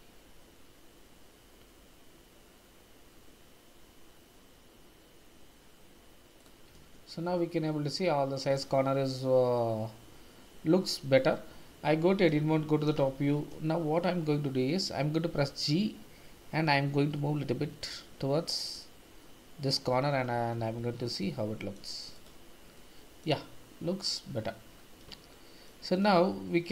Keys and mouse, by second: 6.4 click, 6.7 Tab, 11.3 Tab, 12.8 KP_7, 13.1 shift+z, 15.4 g, 19.6 click, 19.9 Tab, 20.8 shift+z, 21.2-21.7 middle drag, 22.2-22.7 drag, 22.7-23.2 middle drag, 25.4 shift+middle drag, 26.0-26.7 middle drag.